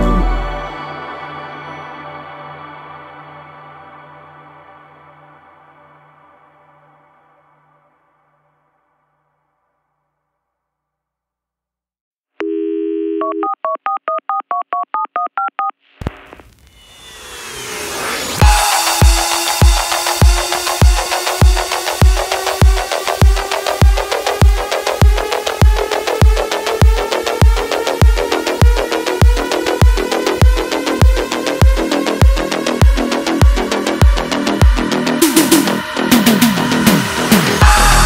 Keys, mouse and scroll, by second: 0.5-1.2 click, 5.0 space, 5.1-5.6 click, 5.4 space, 6.0 click, 9.5 click, 15.6 click, 17.2 space, 17.4 click, 17.6-18.1 space, 18.7 click, 32.8 click, 33.3 right click, 33.3 right click, 35.2 click, 36.2 right click, 37.6 click.